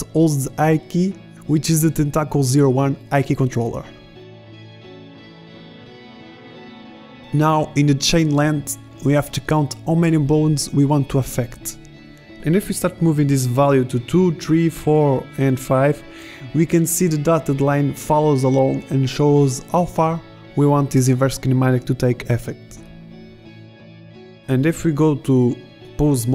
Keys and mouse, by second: 0.5-2.1 middle drag, 8.9-11.2 drag, 11.2-14.3 middle drag, 14.3-16.0 drag, 18.2 middle click, 19.3 middle click, 19.7 middle click, 20.0 middle drag, 20.6 right click, 21.2 g, 25.2-25.9 middle drag, 25.9 g.